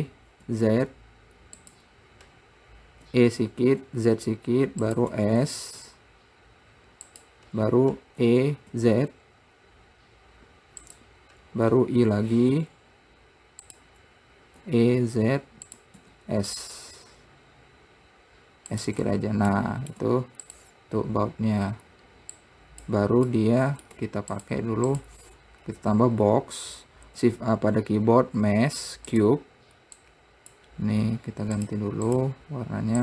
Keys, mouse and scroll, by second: 0.0 e, 3.5 e, 5.6 s, 8.6 e, 15.0 e, 16.4 s, 19.4 Tab, 20.0 middle click, 21.4-21.7 scroll down 2, 22.8-23.8 drag, 23.8 middle click, 24.3 `, 25.4 click, 26.0-26.9 scroll up 1, 26.9 scroll down 2, 27.6 shift+a, 30.4 click, 32.0 click, 32.5 click.